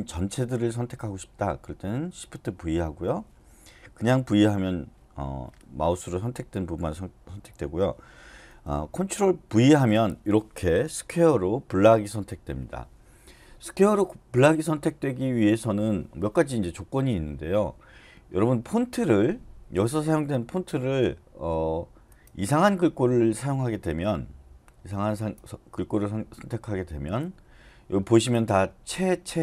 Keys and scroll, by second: 2.6 shift+v, 4.2 v, 9.5 ctrl+v.